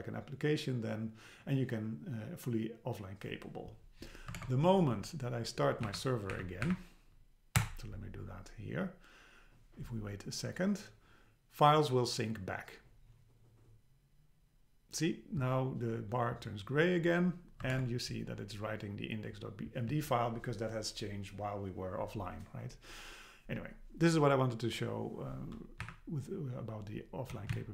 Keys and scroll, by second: 4.4 super+Tab, 5.9 Up, 6.5 Up, 7.6 Return, 17.7 super+Tab, 25.8 Up, 27.5 shift+Down.